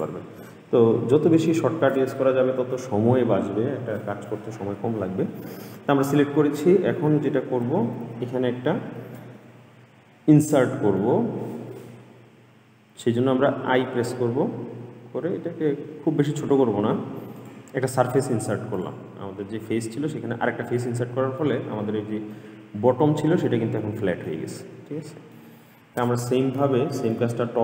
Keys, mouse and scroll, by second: 0.1 click, 1.7-4.8 middle drag, 11.2-13.9 middle drag, 18.1 middle click, 18.9 click, 20.3-20.9 scroll up 1, 20.9 middle click, 21.9-22.5 scroll up 1, 22.5-25.9 middle drag, 25.9-26.8 scroll down 3, 26.8 scroll down 1, 26.8-27.6 shift+middle drag.